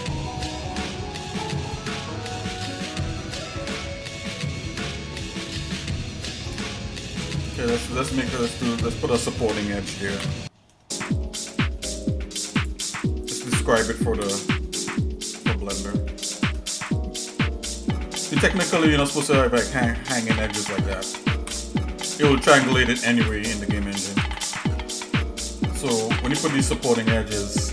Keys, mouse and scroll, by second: 0.8 shift+middle click, 0.9 scroll up 2, 1.7 click, 2.0-3.8 drag, 5.0 shift+middle click, 6.4 click, 7.5 click, 8.0 click, 8.8 shift+click, 10.2 j, 10.9 shift+middle click, 11.5 middle click, 12.5 click, 13.2 shift+click, 14.2 j, 15.6 scroll down 1, 16.1 shift+middle click, 18.7 click, 19.2 shift+click, 21.4 j, 22.7 click, 23.1 shift+click, 24.3 j, 24.9 shift+middle click.